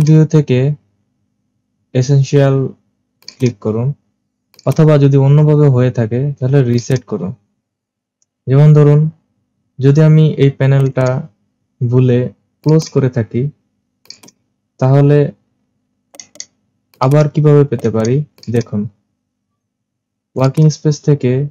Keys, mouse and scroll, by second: 3.3-4.4 drag, 4.6-5.7 drag, 6.8-8.4 drag, 10.9-12.0 right drag, 12.7-13.8 drag, 14.1-15.2 drag, 16.2 right click, 17.0-17.8 drag, 17.8 right click, 18.4-18.8 drag, 20.5 click.